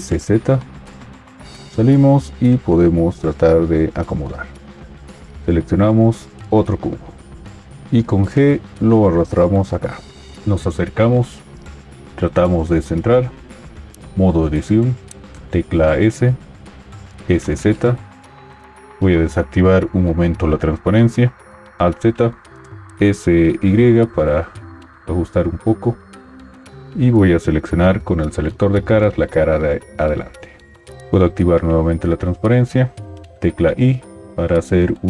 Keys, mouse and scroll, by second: 1.5 Tab, 7.9 g, 14.2 Tab, 15.3 s, 17.3 s, 17.3 z, 21.8 alt+z, 23.0 s, 32.0 alt+z, 33.6 i.